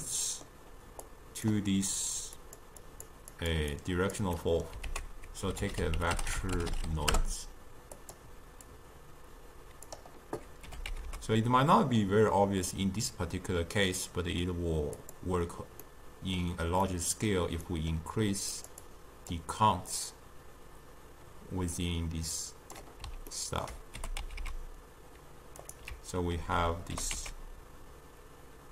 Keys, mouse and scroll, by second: 0.0-1.2 middle drag, 1.2 click, 2.5 click, 3.0 click, 3.4 click, 3.9-4.5 drag, 4.5 middle click, 4.9 ctrl+a, 8.8-10.8 drag, 10.8 g, 15.9-18.7 middle drag, 18.7 click, 18.9-23.1 drag, 23.4-24.1 ctrl+middle drag, 24.1 g, 26.4 alt+r, 27.0 g.